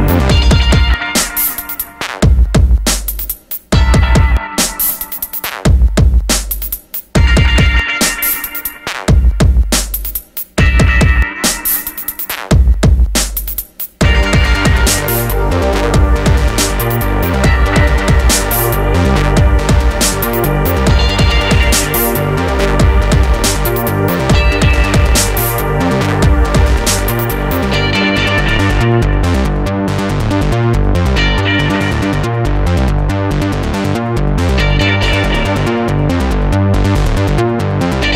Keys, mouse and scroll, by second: 29.5 click, 32.2 shift+click.